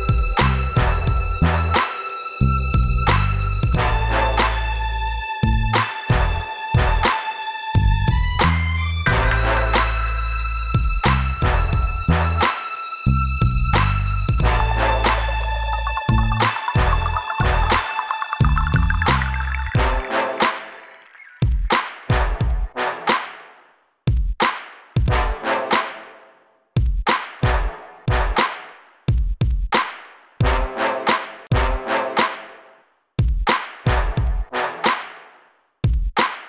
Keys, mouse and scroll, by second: 0.3 click, 0.9 click, 6.5-7.2 scroll down 1, 7.5-7.9 scroll up 2, 8.5 click, 9.7 click, 11.4 scroll down 2, 14.2 click, 15.7 click, 15.9 click, 19.4 middle click, 25.0 click, 26.7 scroll up 1, 27.6 click, 28.8 click, 29.5 click, 30.6 click, 33.3-33.6 scroll down 2, 34.5 scroll up 1.